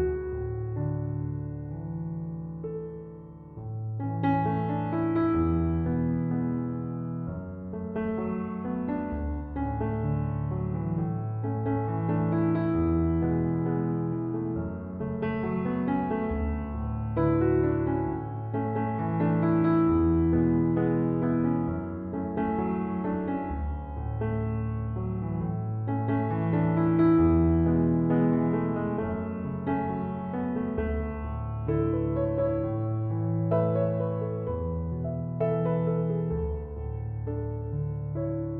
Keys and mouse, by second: 11.6 click, 19.6 click, 27.3 click.